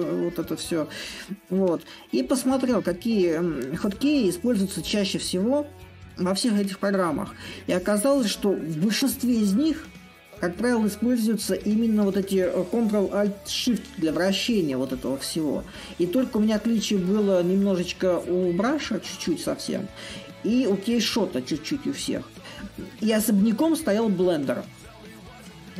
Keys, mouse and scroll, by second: 6.8-9.5 middle drag, 9.5-11.9 drag, 14.2-16.2 drag, 16.6-19.3 drag, 21.7-25.7 drag.